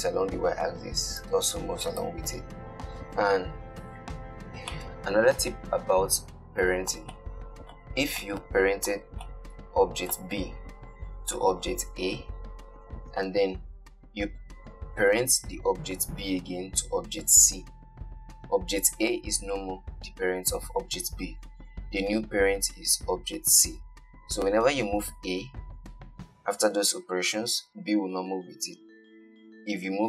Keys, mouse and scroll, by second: 1.2 click, 1.5 g, 3.8-4.5 scroll down 2, 4.5-5.0 scroll down 2, 5.0-10.1 shift+middle drag.